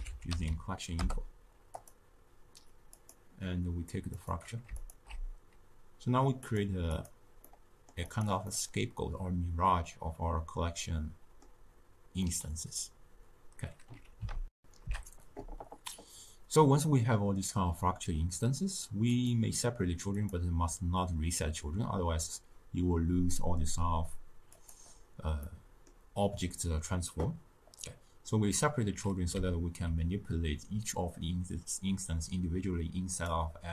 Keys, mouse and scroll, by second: 4.8 alt+shift+click, 6.4 click, 7.4-8.2 middle drag, 8.2 click, 8.5-14.4 middle drag, 19.0-20.2 drag, 24.5 click, 25.4-33.1 middle drag, 33.1 click.